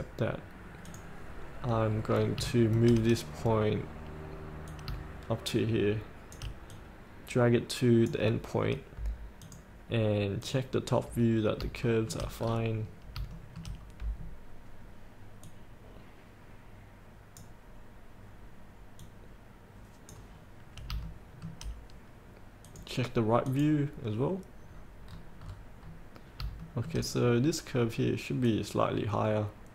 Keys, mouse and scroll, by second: 2.0 scroll down 1, 2.6 shift+middle click, 3.5-4.8 scroll down 1, 4.8-6.5 drag, 6.8 click, 12.0 shift+middle click, 12.5-13.3 scroll down 2, 13.4 shift+middle click, 14.0-15.5 scroll down 1, 15.5-20.5 drag, 20.5-21.0 scroll up 1, 21.2 shift+middle click, 22.8 click, 24.8 scroll down 1, 25.6-26.0 scroll down 1, 26.7 shift+middle click, 27.2-28.5 scroll down 1, 28.6 click.